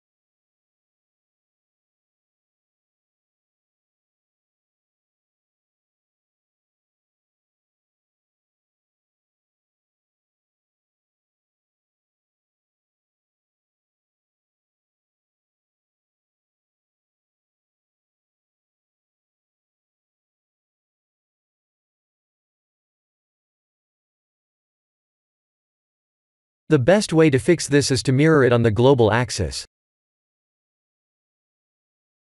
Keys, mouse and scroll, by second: 0.0 s, 2.9 middle click, 3.2 middle click, 3.3 middle click, 3.5 middle click, 3.8 middle click, 4.4 middle click, 5.4 middle click, 5.6 middle click, 5.7 middle click, 6.0 middle click, 6.2 middle click, 7.6 KP_1, 11.1 shift+z, 14.3 middle click, 19.2 middle click, 19.8 middle click, 19.9 middle click, 20.2 middle click, 20.3 middle click, 21.1 middle click, 21.2 middle click, 22.7 middle click, 23.0 middle click, 23.6-25.0 middle click, 26.0 KP_1, 27.9 Tab, 28.7 right click.